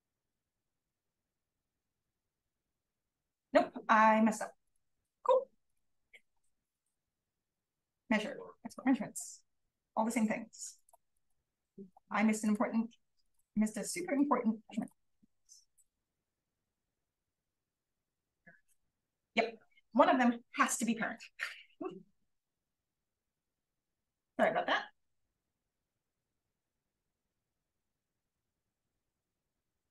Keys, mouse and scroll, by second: 11.1 click, 13.1 click, 14.7 click, 15.6 click, 16.1 click, 16.8 click, 17.7 click, 24.1-25.1 scroll up 1, 24.3-27.4 drag, 25.1-27.4 scroll up 1, 27.4-28.2 scroll up 1, 28.2 click, 28.2-28.9 scroll up 1.